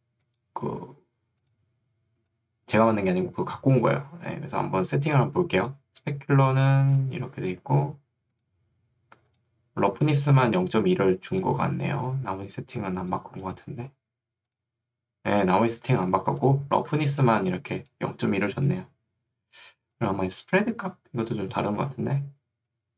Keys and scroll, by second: 6.9 ctrl+2, 7.9 Escape, 12.7 Escape, 17.1 ctrl+2.